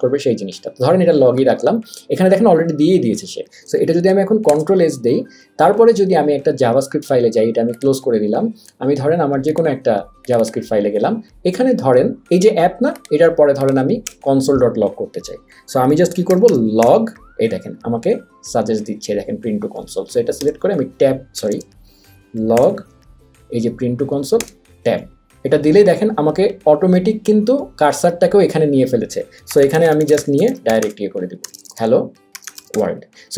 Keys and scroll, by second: 4.5 super+s, 14.1 Return, 16.1-17.4 typing, 18.7 Down, 21.4 BackSpace, 22.6 g, 23.5 Down, 24.4 Tab, 29.3-33.2 typing.